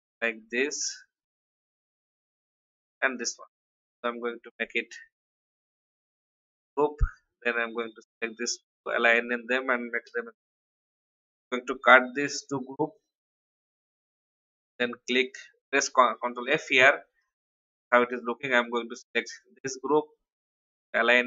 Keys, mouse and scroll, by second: 0.2-1.9 alt+drag, 3.1 shift+click, 5.9 ctrl+g, 6.7 click, 7.7 shift+click, 9.0 click, 10.0 ctrl+g, 10.8 shift+click, 11.9 ctrl+x, 12.9 click, 14.7 ctrl+f, 18.5 shift+click.